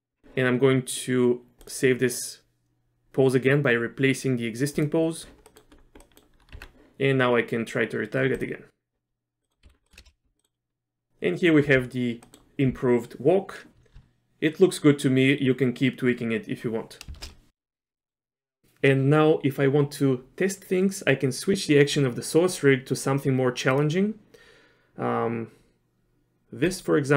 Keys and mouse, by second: 0.2 a, 1.6-4.8 drag, 5.5 middle click, 6.0 middle click, 6.5 Tab, 9.4 middle click, 9.6 z, 9.9 middle click, 10.0 shift+space, 10.4 middle click, 12.2 middle click, 17.1 shift+space, 17.5 z, 18.0 middle click, 18.4 click, 23.7 click.